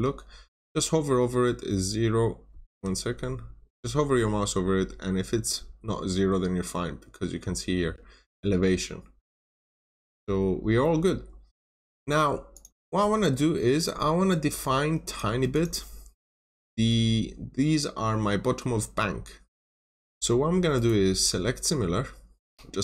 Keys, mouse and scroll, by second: 2.3 scroll down 1, 2.7 Escape, 10.0 scroll down 1, 10.7 middle click, 11.0 scroll down 1, 12.4 click, 13.0 scroll up 1, 13.9-14.9 scroll down 1, 14.9 click, 15.4 double click, 16.7 scroll down 1, 16.8 middle click, 19.1 scroll up 1, 20.6 right click, 22.2 click, 22.7 scroll down 1.